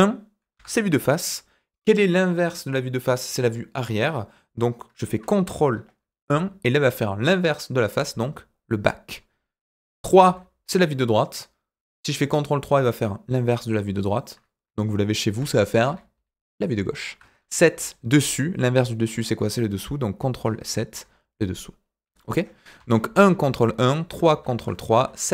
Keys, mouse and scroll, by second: 0.5 KP_1, 6.2 ctrl+KP_1, 10.2 KP_3, 15.8 ctrl+KP_3, 17.7 KP_7, 20.4 ctrl+KP_7, 22.7 KP_1, 23.2 ctrl+KP_1, 23.8 KP_3, 24.9 KP_7.